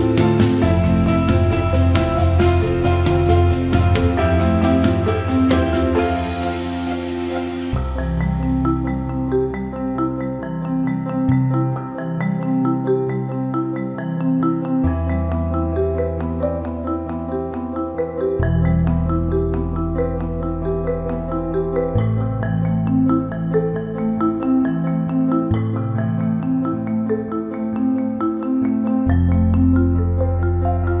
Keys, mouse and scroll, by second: 1.3 click, 1.5 click, 2.6 click, 3.8 click, 4.4 alt+middle click, 5.4 Tab, 6.0 alt+middle click, 6.5 alt+middle click, 7.5 click, 7.8 click, 8.5 click, 9.3 alt+middle click, 12.3 click, 12.5 click, 13.2 shift+click, 13.3 shift+click, 15.2 click, 15.6 alt+middle click, 16.7 ctrl+KP_Add, 18.6 middle click, 21.2 alt+middle click, 22.2 alt+middle click, 23.6 ctrl+KP_Add, 24.9 middle click, 26.0 click, 27.4-31.0 drag.